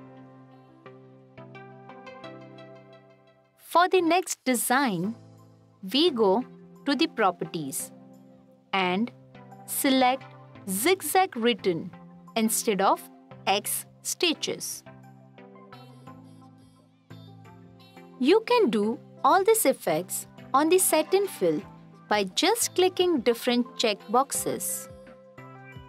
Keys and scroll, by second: 6.1 f, 17.8 t.